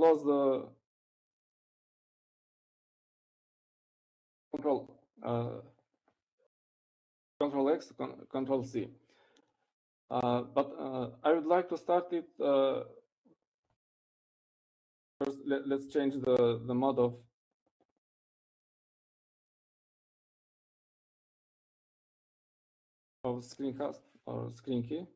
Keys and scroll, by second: 5.7 ctrl+x, 6.5 ctrl+c.